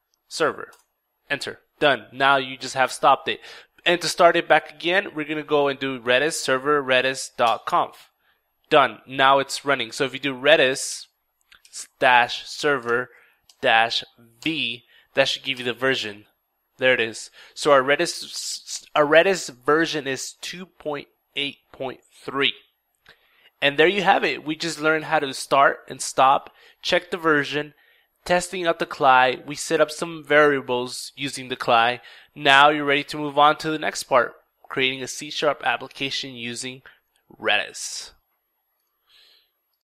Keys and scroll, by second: 0.2 ctrl+Return, 3.8 ctrl+Up, 3.8 typing, 4.0 ctrl+Up, 4.3 ctrl+Up, 4.5 ctrl+Up, 4.9 ctrl+Down, 9.5 ctrl+r, 9.5 typing, 9.9 ctrl+e, 10.2 ctrl+d, 10.3 ctrl+i, 10.5 ctrl+s, 11.1 ctrl+-, 11.6 ctrl+s, 11.7 ctrl+e, 12.1 ctrl+v, 12.3 ctrl+e, 12.5 ctrl+r, 12.5 ctrl+space, 12.9 ctrl+-, 13.9 ctrl+v, 15.0 ctrl+Return.